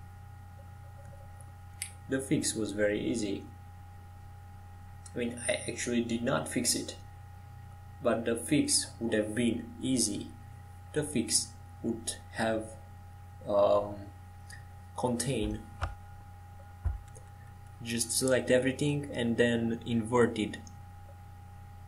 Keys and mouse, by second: 0.1 g, 1.4 click, 2.4-3.7 drag, 3.1 ctrl+j, 4.2 g, 16.0 click, 16.3 x, 18.3 g.